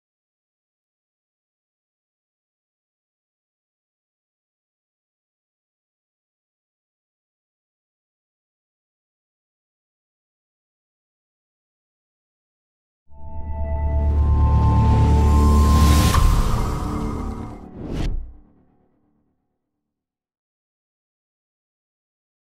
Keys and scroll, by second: 2.3 Return, 5.3 Return, 9.0 Return, 12.0 Return, 12.7 ctrl+-, 13.2 ctrl+=, 13.8 ctrl+-.